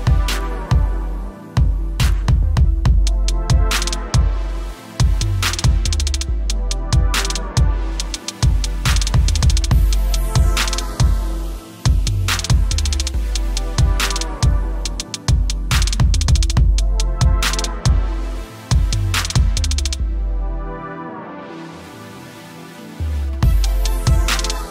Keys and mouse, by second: 2.4 click, 13.3 click, 18.3 click.